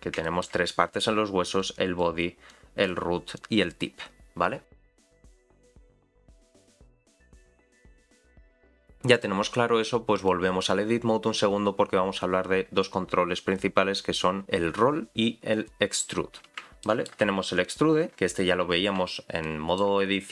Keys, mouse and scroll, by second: 0.2 shift+middle click, 0.9-1.6 scroll down 2, 1.6 click, 2.5 click, 3.3 click, 9.1-10.3 drag, 16.8 shift+middle click, 17.6 click, 17.9-18.5 scroll down 1, 18.5-19.0 scroll down 4, 19.4 shift+middle click.